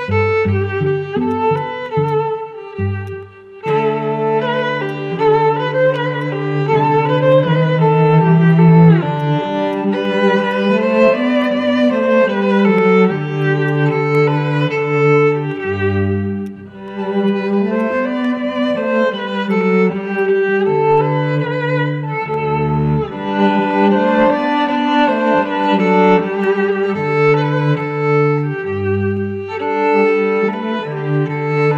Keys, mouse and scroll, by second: 1.5 right click, 2.4 scroll down 1, 2.9 scroll down 1, 3.0 alt+click, 4.0 scroll up 1, 4.4 alt+middle click, 4.8 alt+click, 6.1 scroll up 1, 6.1 alt+click, 8.0 scroll down 1, 13.6 alt+click, 15.8-16.1 alt+scroll up 2, 16.1 alt+middle click, 16.3 alt+click, 16.8 alt+middle click, 17.2 alt+click, 17.7 alt+click, 19.1 alt+middle click, 19.1 click, 19.2 scroll down 1, 20.1 alt+click.